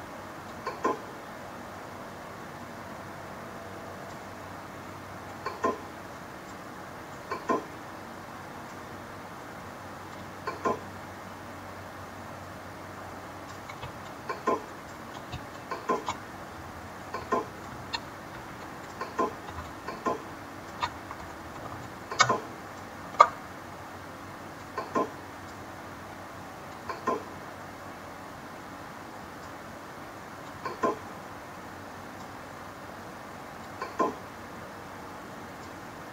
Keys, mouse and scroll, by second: 13.7 space, 14.0 click, 14.2 space, 15.4 click, 15.8 space, 16.9 click, 19.5 click, 21.7 alt+click, 24.5 click.